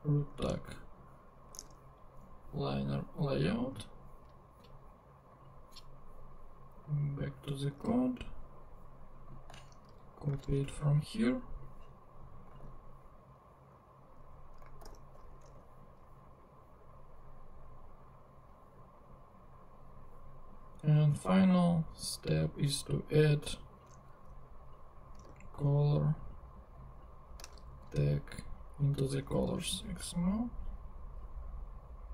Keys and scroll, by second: 0.3 super+Tab, 1.5 super+Tab, 7.7 super+Tab, 10.3 super+c, 10.5 super+Tab, 12.5 super+v, 14.8 alt+super+l, 15.4 alt+super+Tab, 16.2 super+Tab, 24.2 Escape, 25.2 shift+Escape, 27.8 shift+super+c, 28.6 super+c, 29.4 super+Tab.